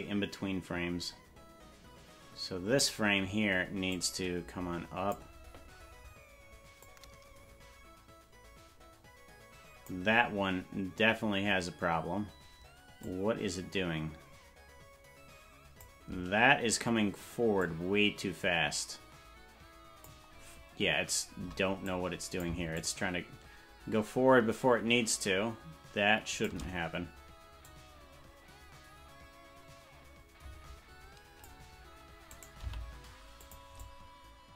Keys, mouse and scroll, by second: 3.9-5.2 drag, 6.8-9.9 drag, 13.0-15.9 drag, 17.6-20.1 drag, 21.9 click, 22.8-26.5 shift+drag, 27.7-31.5 drag, 32.3 right click, 32.6 g, 33.8-34.5 drag.